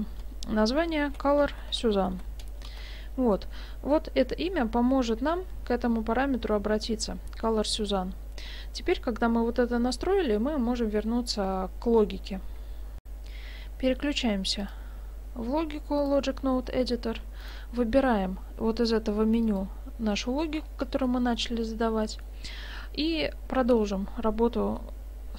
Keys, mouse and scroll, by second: 2.0 n, 13.0 F9, 14.7 click, 16.7-17.4 scroll down 1, 17.4 click, 17.4 scroll down 3, 20.7-21.2 scroll up 3, 21.1 middle click, 22.1 middle click, 23.5 scroll up 1, 23.7 middle click.